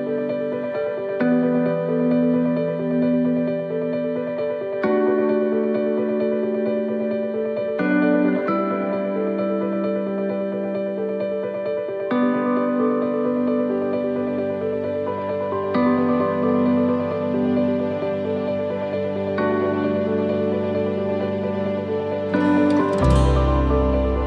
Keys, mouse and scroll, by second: 0.2 alt+shift+right click, 1.2 middle click, 1.6 shift+middle click, 2.3 middle click, 2.9 shift+middle click, 4.2 scroll up 3, 4.5 middle click, 5.0 shift+middle click, 7.2 click, 8.6 c, 10.7 middle click, 11.8 shift+middle click, 13.0 e, 14.3 alt+s, 23.1 middle click, 23.1 s.